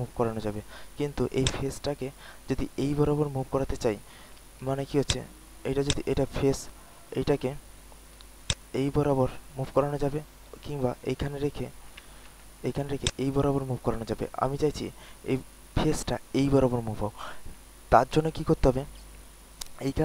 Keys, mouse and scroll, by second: 2.2-4.3 drag, 4.4 w, 5.0 click, 8.5-11.4 drag, 12.3 ctrl+z, 13.0-15.4 drag.